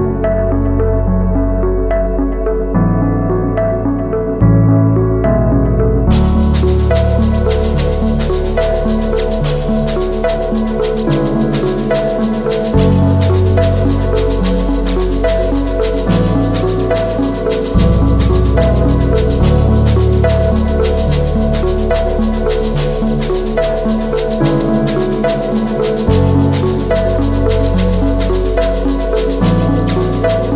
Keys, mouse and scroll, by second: 3.6 alt+click, 4.0 scroll up 2, 4.2 alt+click, 5.1 alt+middle click, 16.2 scroll down 1, 19.6-20.0 scroll up 3, 20.9-25.3 drag, 25.5-26.0 scroll up 2, 26.7-28.7 drag, 29.0 scroll up 2, 29.5 alt+click, 30.4-30.5 scroll down 3.